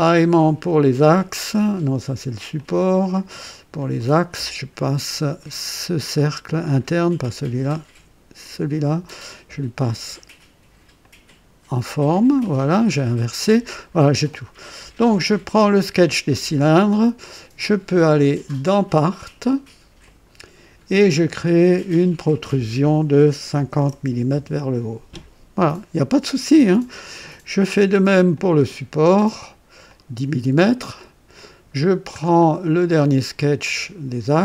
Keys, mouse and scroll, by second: 1.0 click, 2.5 click, 3.8 click, 5.5 click, 6.2 scroll up 1, 6.7 click, 8.4 click, 9.8 click, 11.0 click, 11.9 scroll down 1, 12.4-12.8 scroll up 1, 15.6 click, 18.5 click, 20.0 click, 21.4 click, 23.5 KP_5, 23.9 KP_0, 24.3 Return, 28.3 click, 29.9 click, 30.9 click, 32.1-32.5 scroll down 2, 33.0 click.